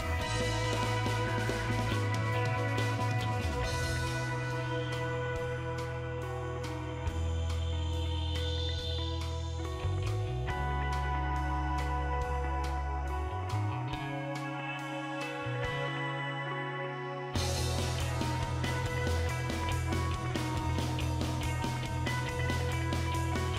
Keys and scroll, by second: 1.4 3, 2.7 BackSpace, 3.2 4, 4.3-6.2 typing, 9.9 BackSpace, 11.3 8, 14.6 5, 15.5 BackSpace, 15.7 BackSpace, 15.9 BackSpace, 23.3-23.5 typing.